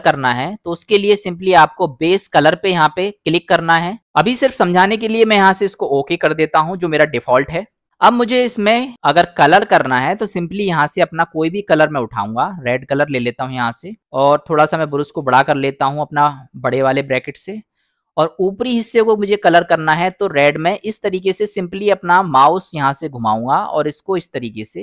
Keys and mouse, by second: 1.4-7.8 drag, 8.3 middle click, 10.7 click, 19.4-24.8 drag.